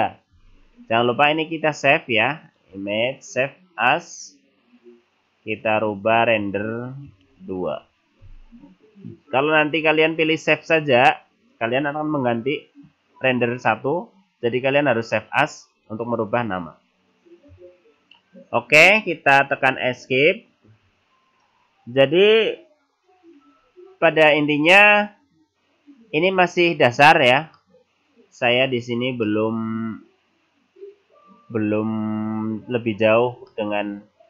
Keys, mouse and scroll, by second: 27.6 middle click, 29.3 middle click, 33.1-33.4 scroll up 2, 33.6 middle click.